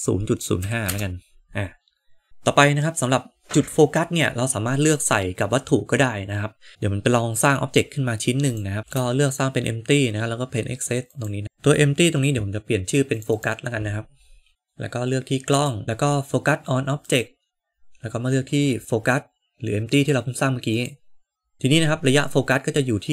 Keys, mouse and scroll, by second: 8.8 ctrl+z, 8.8 shift+a, 13.0-14.5 drag, 15.4 click, 16.9-20.9 drag.